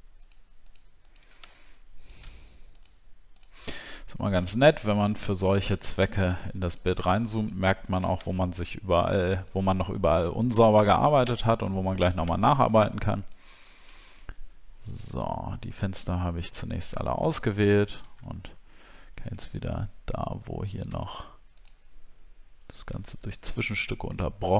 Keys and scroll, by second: 4.5-5.2 alt+scroll down 5, 14.0 alt+scroll down 1, 14.6 alt+scroll down 1, 18.2 alt+scroll up 1, 18.8 alt+scroll up 1.